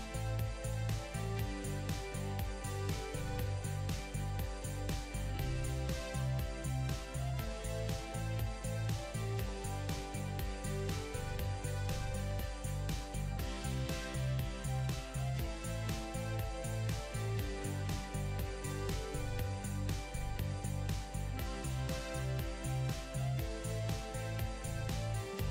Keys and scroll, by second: 4.3 w.